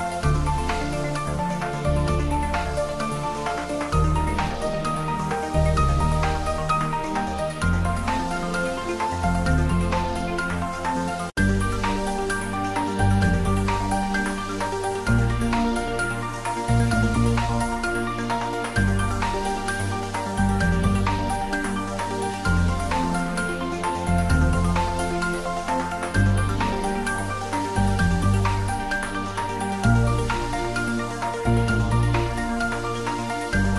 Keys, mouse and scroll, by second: 1.2 click, 1.3 scroll down 1, 2.6 g, 7.8 click, 8.5 s, 10.3 s, 10.4 z, 11.5 click, 12.3 scroll down 1, 12.7 middle click, 13.8 click, 14.5 scroll up 1, 15.4 shift+z, 15.7 click, 16.7 shift+z, 17.3 g, 19.5 click, 20.0 s, 20.4 click, 20.6 scroll down 1, 20.9 middle click, 21.6 scroll down 1, 21.9-24.1 middle drag, 28.8 click, 30.2 click, 30.5-30.8 scroll up 1, 31.3 shift+d, 31.5 z, 32.3 click, 32.5 ctrl+z, 33.4 `, 33.6 3.